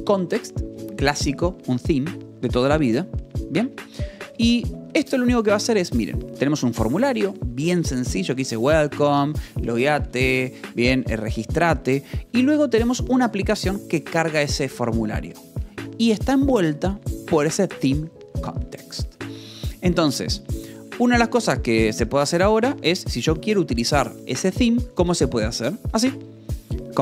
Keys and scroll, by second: 3.5 Escape, 3.9 j, 4.5 k, 5.9 j, 7.1 Escape, 7.3 k, 8.7 Escape, 8.8 j, 9.6 Escape, 9.7 j, 10.3 Escape, 10.5 k, 11.0 j, 12.9 j, 14.1 Escape, 15.2 shift+v, 15.5 Escape, 15.6 k, 16.3 shift+v, 19.1 Escape, 19.3 j, 20.3 j, 21.2 k, 22.7 j, 24.0 shift+v, 24.5 Escape, 25.6 j.